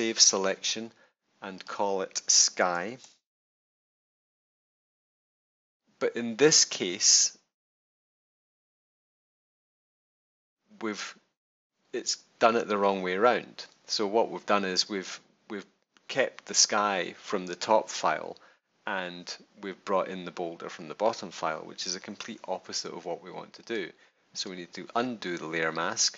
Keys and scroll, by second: 2.5-3.7 typing.